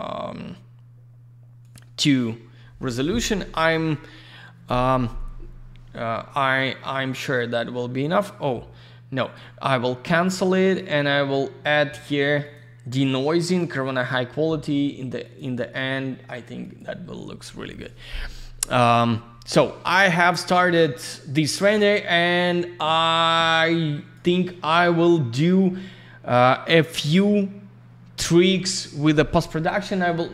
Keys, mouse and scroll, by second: 1.6 click, 1.7 click, 9.2 click, 10.6 click, 12.4 click, 13.4 click, 15.2 click, 15.3 click, 16.6 click, 16.7 click, 22.5 click.